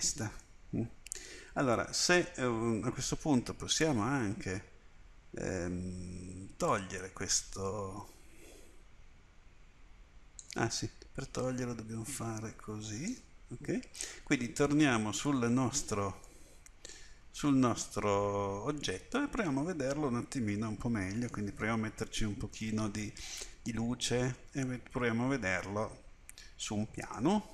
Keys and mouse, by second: 0.5 middle click, 0.8 middle click, 1.1 middle click, 6.7-7.8 drag, 7.8 right click, 9.3-12.1 middle drag, 12.1 click, 13.1 right click, 15.0 middle click, 17.2 Tab, 18.9 right click, 19.4 middle click, 22.0-24.4 middle drag, 24.4 click, 24.6 middle click.